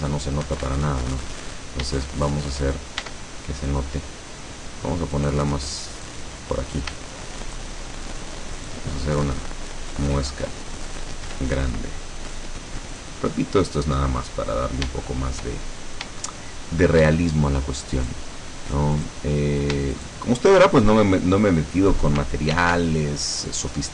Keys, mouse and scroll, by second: 0.6 Escape, 1.3-1.7 scroll up 2, 2.1-2.8 shift+middle drag, 3.1 shift+Tab, 3.7-4.3 shift+scroll up 2, 5.3 right click, 6.1 right click, 7.5 shift+right click, 8.7 shift+right click, 10.3 shift+middle click, 10.8 scroll up 1, 11.3 e, 13.0 click, 13.3 middle click, 14.3-14.6 scroll down 1, 15.1 shift+middle click, 16.0 scroll up 1, 16.3 shift+middle click, 18.1 right click, 19.1 right click, 20.1 shift+right click, 22.7 ctrl+r, 23.5 click.